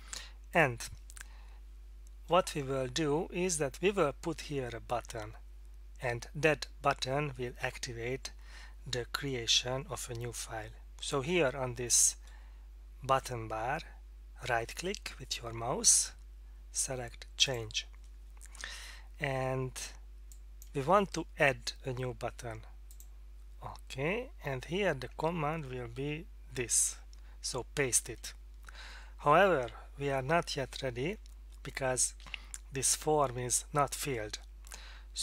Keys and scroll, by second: 26.5 ctrl+v.